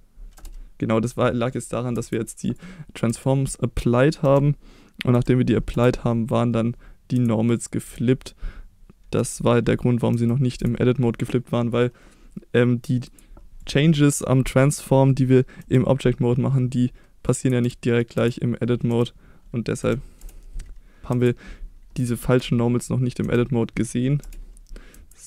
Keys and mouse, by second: 1.3 middle click, 2.0 Tab, 3.1 Tab, 4.2 a, 5.1 F3, 7.2 Tab, 7.6 click, 7.9 Tab, 9.2 a, 10.1 F3, 13.1 Tab, 13.6 click, 15.6 F3, 17.6 Tab, 18.2 Tab, 18.9 a, 19.8 F3, 21.0 Tab, 21.1 Tab, 22.2 a, 23.2 F3, 24.9 Tab.